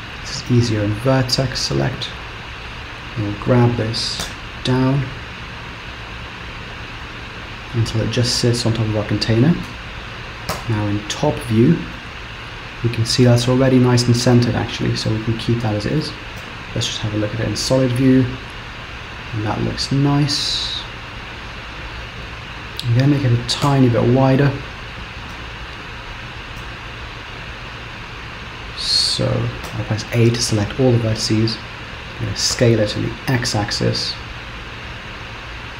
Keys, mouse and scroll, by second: 0.5 click, 1.4 click, 3.5 g, 9.7 Tab, 10.7 KP_7, 12.0 middle click, 14.7-15.0 scroll down 3, 15.1 middle click, 16.5 z, 18.1 middle click, 23.7 KP_7, 24.7-25.5 scroll up 4, 25.5 Tab, 26.6 z, 28.3 scroll up 2, 29.8 a, 32.6 s.